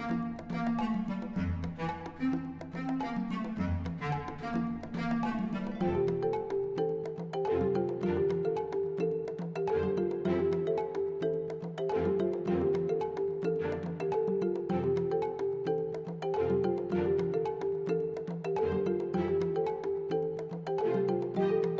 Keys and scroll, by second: 0.7 g, 0.9 x, 7.1 r, 7.3 x, 7.5 9, 7.8 0, 8.0 Return, 12.0 Tab, 12.4-14.7 typing, 13.6 Return, 14.9 Return, 15.8 Tab, 17.3 Tab, 18.1 alt+a, 18.7 ctrl+r, 19.8 ctrl+b, 21.1 alt+s.